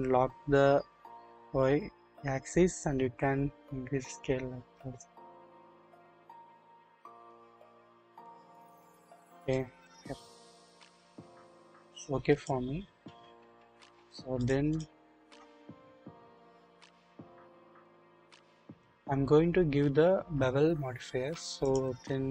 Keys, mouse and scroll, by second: 1.2 typing, 9.5-11.2 middle drag, 11.2-12.5 drag, 13.9 scroll down 1, 13.9-14.4 drag, 15.5 click, 17.2-17.9 scroll up 1, 17.9 click, 20.3-21.8 scroll down 1.